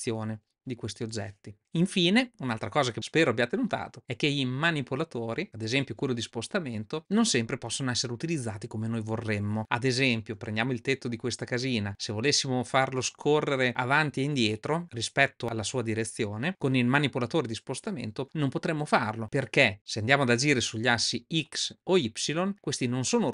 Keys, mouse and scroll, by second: 5.4 click, 9.6-11.2 middle drag, 11.6-13.5 middle drag, 14.4-16.5 middle drag, 20.6-21.3 drag, 22.5 click.